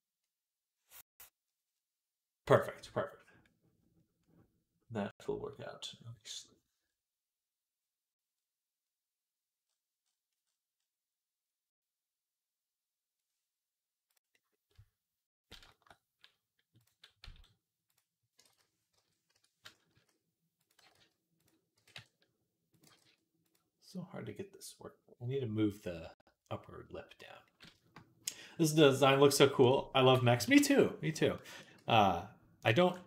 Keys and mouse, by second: 15.4 shift+middle click, 17.1 s, 18.3 ctrl+z, 19.8 s, 20.6 g, 21.6 g, 22.8 g, 27.4-33.0 shift+middle drag, 29.4 click, 30.2 KP_3, 30.4 Tab, 31.6 z, 32.6 b.